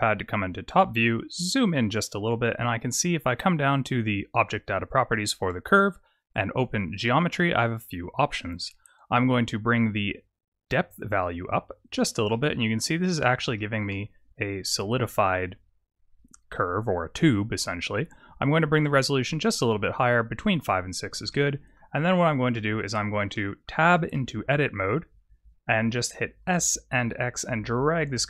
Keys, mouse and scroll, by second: 1.0-2.0 scroll up 7, 2.0 scroll up 1, 4.5 click, 6.8 click, 7.9-9.9 scroll down 2, 9.9-10.8 scroll down 1, 10.8 click, 11.1 click, 11.7 click, 12.2 middle click, 12.8-13.3 scroll up 4, 13.5 shift+middle click, 18.3 click, 19.5 click, 21.2 middle click, 22.0-22.5 scroll down 5, 22.4 middle click, 23.2 middle click, 24.0 Tab, 24.7-25.1 scroll down 2, 26.3 s.